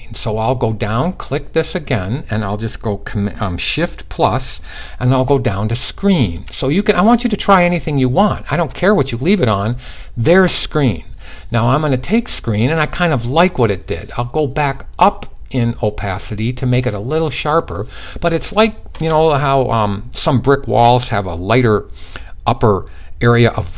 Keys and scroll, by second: 4.7-6.0 typing, 7.2-8.1 typing.